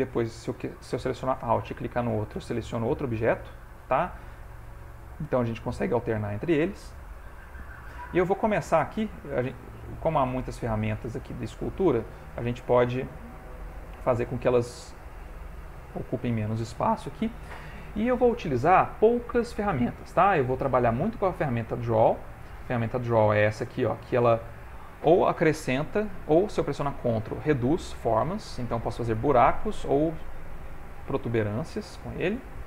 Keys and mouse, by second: 2.6 alt+click, 3.9 click, 11.0 click, 23.1 click, 27.0 ctrl+click, 29.4 middle click, 31.0 ctrl+z, 31.3 ctrl+z, 32.0 middle click.